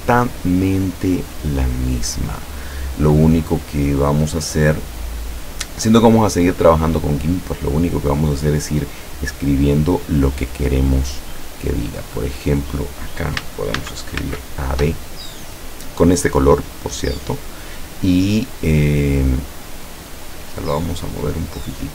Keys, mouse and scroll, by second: 3.4-5.0 drag, 5.0 scroll up 2, 5.8 middle click, 6.3 click, 8.3 click, 12.2 click, 13.8 shift+a, 14.3 shift+v, 20.9 click.